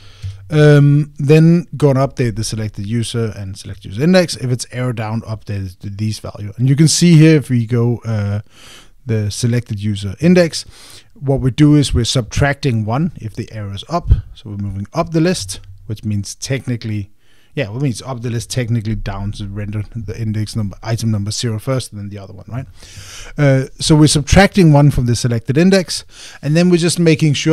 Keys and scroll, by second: 1.0 Escape.